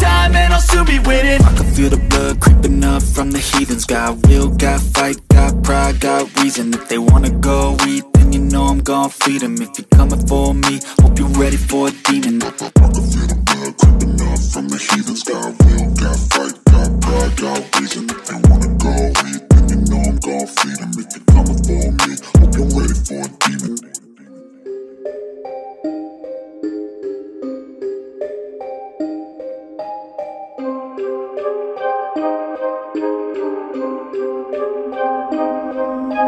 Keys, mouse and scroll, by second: 2.5 Tab, 3.2 shift+Tab, 5.4 click, 7.3 space, 7.4 click, 7.8 space, 8.2 click, 8.3-10.3 ctrl+drag, 10.3 p, 12.7-26.4 drag, 27.8 v, 28.4 space, 28.5 click, 28.9 space, 30.3 a, 30.7 click, 32.5-35.8 ctrl+drag, 35.8-36.2 typing.